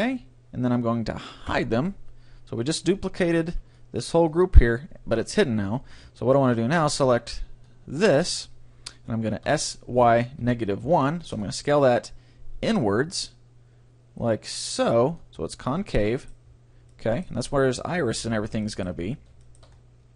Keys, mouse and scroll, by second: 0.1-1.9 drag, 1.5 h, 3.6 b, 3.7 middle click, 5.8 a, 6.0 b, 9.4 s, 12.6-14.6 drag, 15.4-20.1 middle drag.